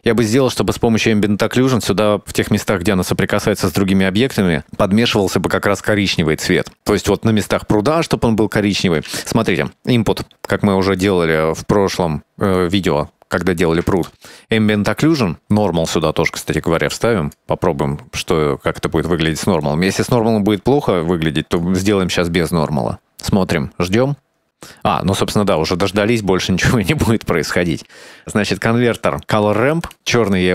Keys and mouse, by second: 1.3 middle click, 1.7 middle click, 2.2 click, 2.6 click, 2.9 middle click, 5.8 middle click, 9.2 shift+a, 14.2 ctrl+shift+click, 16.2 middle click, 17.3-18.5 drag, 19.1 middle click, 20.2-21.8 drag, 24.9 middle click, 28.2 shift+a, 30.4-30.5 drag.